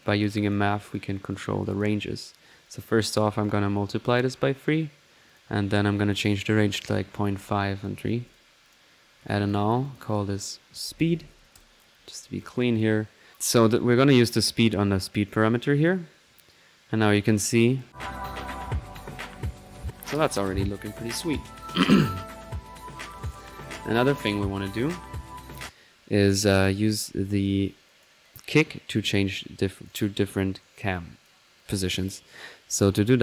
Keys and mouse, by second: 0.0 drag, 0.5 drag, 1.7 click, 2.6 drag, 3.2-5.7 drag, 5.9-7.4 drag, 7.6 click, 8.6 click, 9.2 alt+n, 9.4 alt+drag, 9.8-10.2 alt+drag, 10.3 alt+click, 12.0 middle click, 12.4 click, 13.3 ctrl+1, 13.3-13.9 drag, 14.0-15.4 drag, 17.6 click, 20.7 click, 21.6 click, 24.6 click, 25.5 click, 26.9 click, 27.9 click, 28.2 click, 28.7 middle click, 29.6 click, 30.1 click, 30.9-31.9 drag, 33.0 middle click.